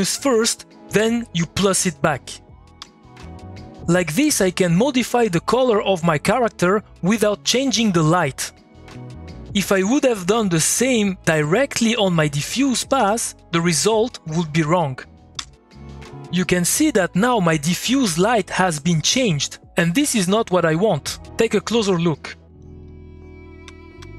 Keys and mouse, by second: 1.8 click, 2.8 2, 5.1-11.9 drag, 11.9 click, 12.7 ctrl+c, 12.9 ctrl+click, 12.9 ctrl+v, 13.5 click, 15.3 2, 22.6 click, 23.4-24.1 typing.